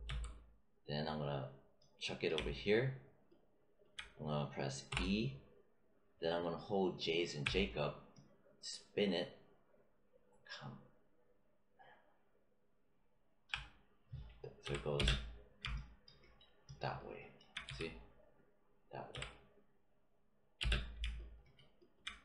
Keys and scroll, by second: 0.0 w, 4.8 e, 7.4 j, 14.6 w, 14.9 space, 17.6 q, 19.0 w, 20.5 space.